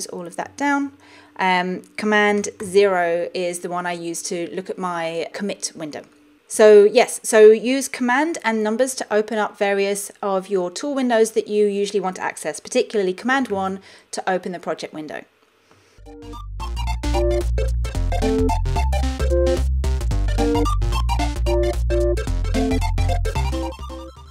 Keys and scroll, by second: 0.7 shift+super+F12, 2.7 super+0, 13.6 super+1.